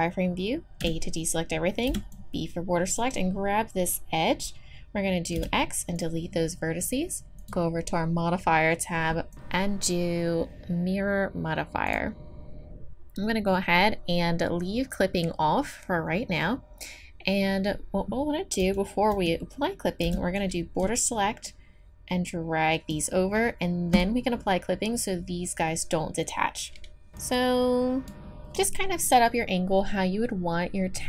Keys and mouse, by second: 0.8 a, 1.9 b, 5.4 x, 7.4-10.5 drag, 18.6 a, 19.1 a, 20.0 b, 22.3-23.3 drag, 23.9-29.1 drag.